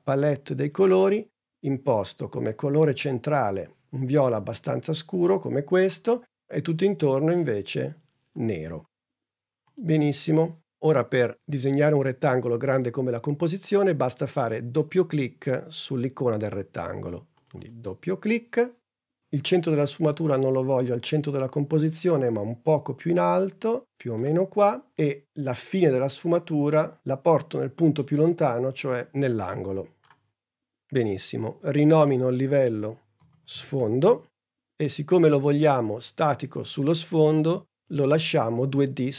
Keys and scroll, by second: 33.2-34.7 typing.